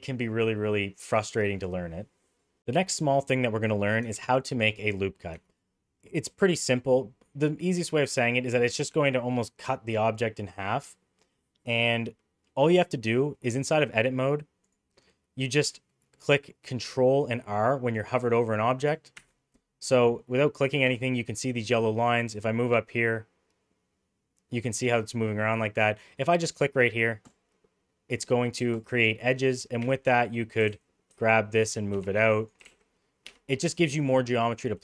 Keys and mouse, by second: 2.5 middle click, 4.0 Tab, 5.3 Tab, 8.0 middle click, 12.4 middle click, 14.6 click, 19.1 ctrl+r, 29.8 2, 30.6 g, 32.6 g, 33.5 middle click.